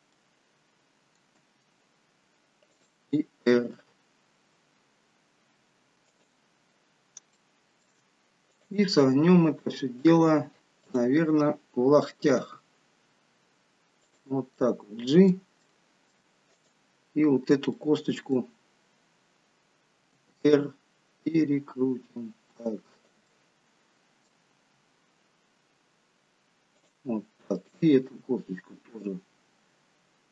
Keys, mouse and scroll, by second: 0.4 middle click, 1.5 g, 3.6 r, 6.9 middle click, 7.4 shift+middle click, 8.6 click, 11.1 click, 12.5 g, 14.8 middle click, 15.8 middle click, 16.6 click, 17.9 middle click, 20.2 r, 23.4 middle click, 24.7 r, 28.1 click.